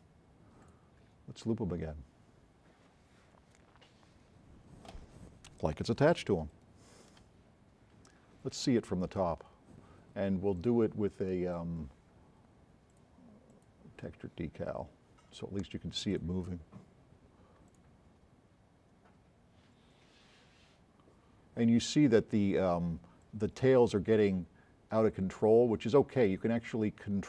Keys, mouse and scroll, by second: 0.7 click, 6.2 s, 6.6 right click, 7.5 scroll down 1, 7.5 middle click, 7.7 middle click, 8.1 right click, 8.1 s, 13.0 click, 13.5 drag, 14.9 scroll up 2, 16.2 click, 17.7 click.